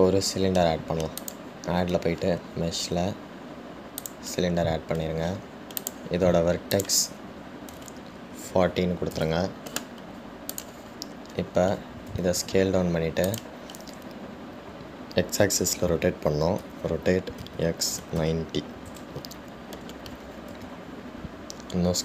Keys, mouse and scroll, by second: 2.4-5.7 drag, 7.0-11.1 drag, 11.7-13.3 drag, 13.3 s.